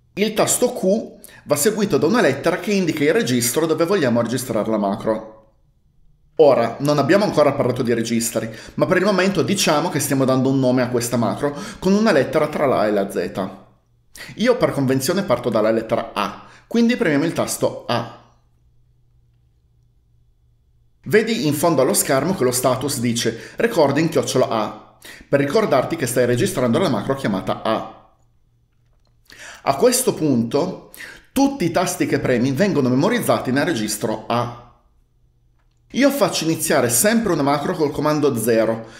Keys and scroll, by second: 18.0 typing, 38.5 0.